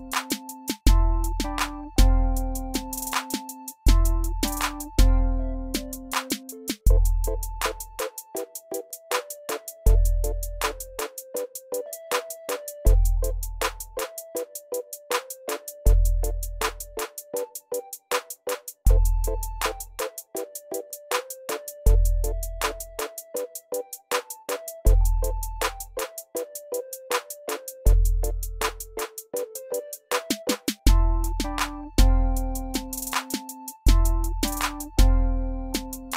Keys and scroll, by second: 18.5 ctrl+d.